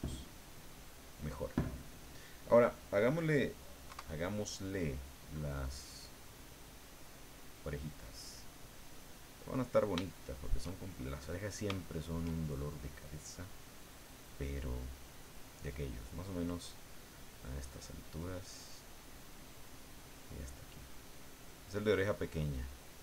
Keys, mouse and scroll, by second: 0.1-2.1 middle drag, 3.9 KP_1, 5.6 click, 6.6 click, 9.1-10.7 middle drag, 11.1-12.3 middle drag, 14.5 click, 16.5-23.0 drag.